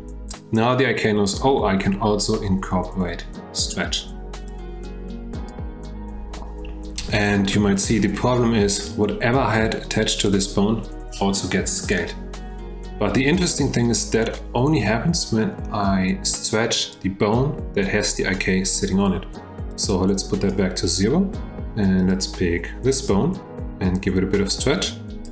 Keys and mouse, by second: 4.6-5.6 drag, 7.6-7.9 shift+middle drag, 10.2 click, 16.8 click, 19.9 click, 22.0 click, 24.5 click.